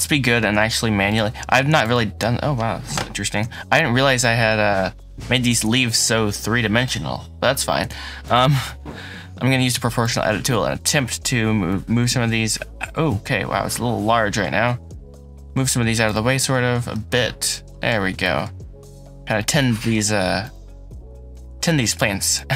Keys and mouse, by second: 0.2 Tab, 1.0 click, 1.6 click, 3.2 KP_Decimal, 5.1 middle click, 5.4 Tab, 5.8 click, 6.0-6.8 middle drag, 7.7 Tab, 8.1-10.0 drag, 10.7 click, 11.5 g, 12.1 shift+z, 15.9 click, 16.8 middle click, 18.1 middle click, 19.6 middle click, 20.2 click, 21.2 g, 22.3-22.5 middle drag.